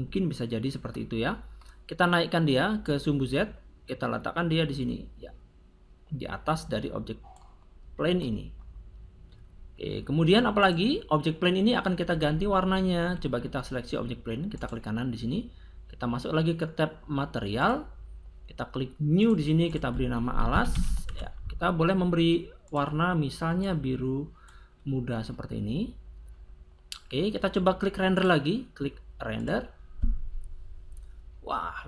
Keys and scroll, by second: 20.3 a, 20.4 l, 20.5 a, 20.7 s, 21.0 Return.